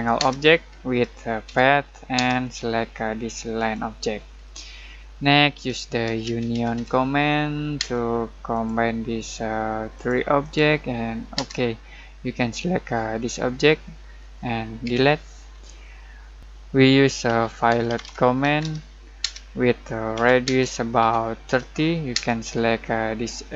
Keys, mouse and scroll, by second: 0.2 space, 1.4 p, 2.1 space, 3.5 click, 4.4-6.0 middle drag, 5.8-7.7 typing, 8.5 click, 11.3 space, 14.8 Delete, 15.6 middle click, 17.2 ctrl+z, 18.4-22.1 typing.